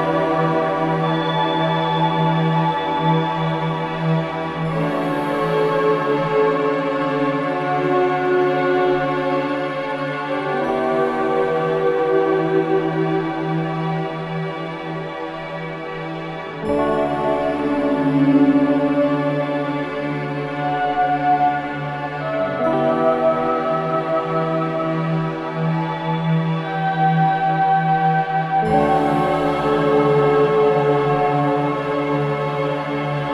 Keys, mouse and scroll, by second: 1.4 click, 1.9-2.5 scroll up 1, 2.9 scroll down 1, 3.5 scroll down 1, 4.7-11.6 drag, 11.6-12.0 scroll down 1, 12.1-12.5 scroll up 1, 13.0-13.4 scroll down 1, 15.4 scroll up 1, 16.0 scroll down 1, 16.9-17.4 scroll up 1, 17.5 scroll down 1, 18.1-18.5 scroll up 1, 19.2 click, 19.7-20.0 scroll down 1, 20.0 scroll up 1, 20.9 click, 21.7 scroll down 1, 23.1 click, 25.7 ctrl+shift+scroll up 2, 26.1-26.4 shift+scroll, 27.2-29.3 drag, 29.3 scroll down 1, 30.7 click, 31.1 scroll up 1, 32.8-33.3 ctrl+shift+drag.